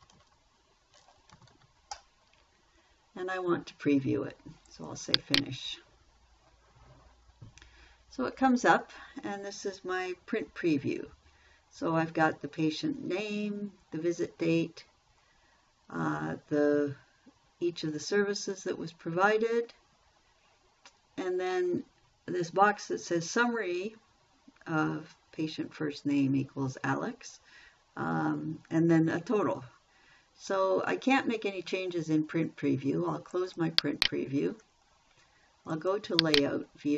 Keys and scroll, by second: 0.0-0.3 typing, 1.5-2.4 typing.